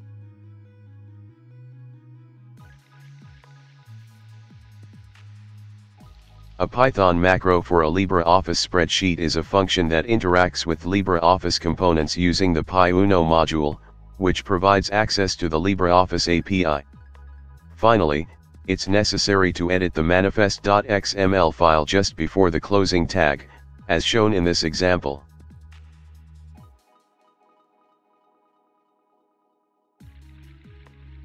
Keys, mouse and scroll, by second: 0.8 Escape, 1.2 Return, 3.4 ctrl+5, 3.8-8.6 typing, 10.9 w, 13.0-21.0 typing, 20.2 ctrl+5, 21.4 Return, 23.4-28.8 typing, 30.0-31.2 typing.